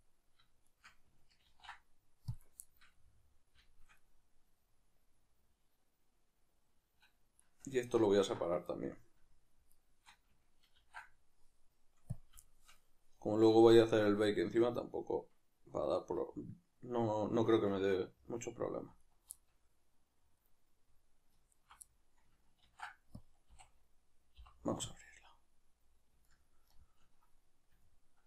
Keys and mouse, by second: 0.7 shift+right click, 1.4 ctrl+e, 2.6-7.4 shift+middle drag, 7.4-8.2 right drag, 8.7-9.7 middle drag, 9.7-10.8 shift+right drag, 10.8 ctrl+e, 12.4-19.0 shift+middle drag, 19.0 alt+right click, 19.3-21.6 middle drag, 21.6 alt+shift+right click, 21.8-28.2 middle drag, 22.6 ctrl+e.